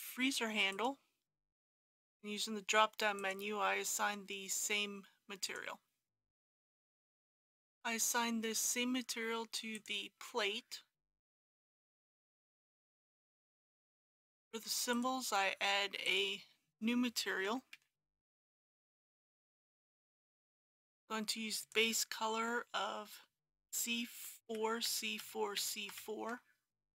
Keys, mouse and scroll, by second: 0.7 click, 6.9 middle click, 7.2-16.0 drag, 17.2-19.2 typing, 19.5 Return, 20.5 click, 23.7 c, 24.4 KP_4, 25.2 KP_4, 25.9 KP_4.